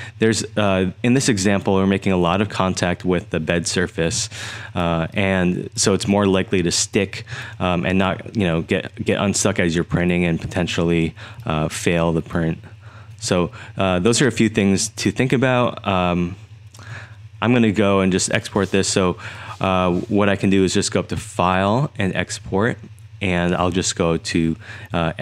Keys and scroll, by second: 0.0-1.7 typing, 4.0-8.2 typing, 11.5-13.2 3, 14.7-16.9 typing, 17.9 typing.